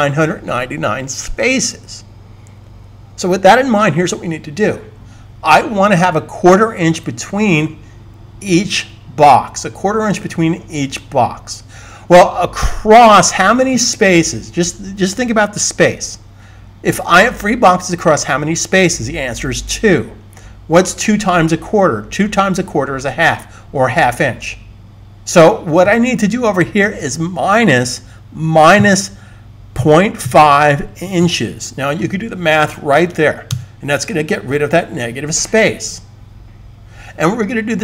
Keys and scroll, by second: 28.6-30.1 typing, 31.1 typing.